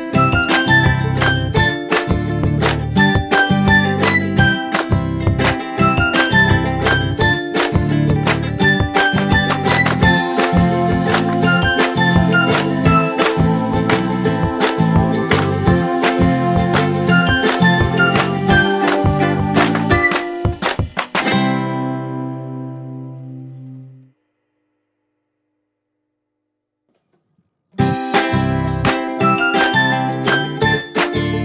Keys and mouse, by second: 3.6 Up, 6.7 click, 9.7 click, 11.5 click, 13.9 click, 17.0 click, 19.0 click, 22.4 click, 24.6 Right, 25.5 click, 27.1 click, 27.6 Left, 29.5 click, 31.1 click.